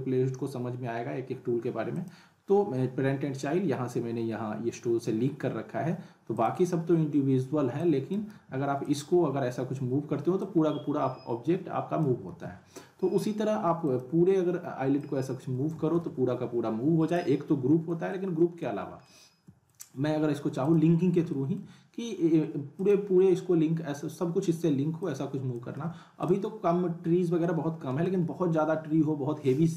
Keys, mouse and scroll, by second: 1.9 click, 6.4 click, 8.1 drag, 8.3 z, 12.2 ctrl+z, 13.8 click, 15.9 z, 17.0 click, 18.1-18.7 middle click, 18.8 scroll up 1, 19.0-19.9 alt+middle drag, 20.6 click, 21.0 scroll down 1, 21.3 alt+middle click, 22.8 click, 23.2-25.0 scroll down 1, 25.0-25.6 click, 25.8 ctrl+z, 26.2 click, 26.5 scroll up 1, 27.4-28.0 alt+middle click, 28.2 scroll down 1, 29.5-29.7 alt+middle click.